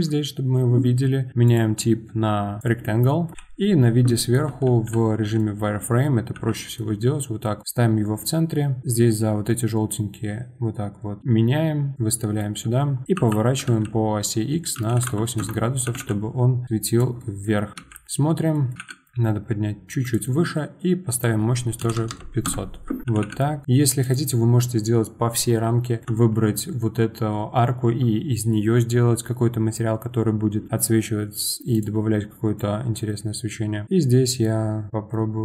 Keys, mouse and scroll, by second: 0.3-1.4 scroll, 2.6 click, 3.4 KP_7, 4.9 z, 6.4 g, 11.9-13.2 middle drag, 13.2 r, 15.9 g, 17.9 z, 18.7 g, 21.1 click, 22.4 KP_0, 23.1 g, 31.7 click, 32.6 click.